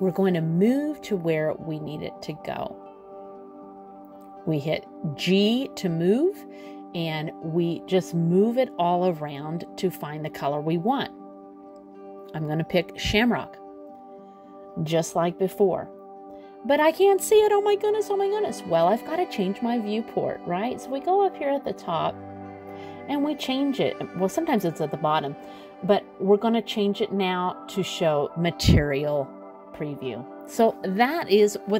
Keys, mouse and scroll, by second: 2.6 g, 15.6 click, 21.2 right click, 29.8 click.